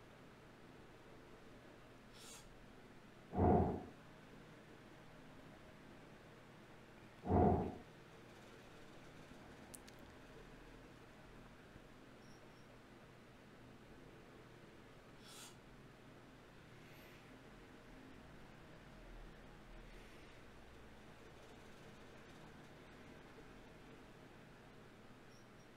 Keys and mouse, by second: 1.1 ctrl+Tab, 4.5-5.5 drag, 5.5 ctrl+Tab, 7.1 f, 7.4 f, 7.7 f, 8.1 f, 9.3-12.2 drag, 9.8 f, 10.2 f, 10.6 f, 13.2 ctrl+Tab, 14.6 click, 15.4-16.8 middle drag.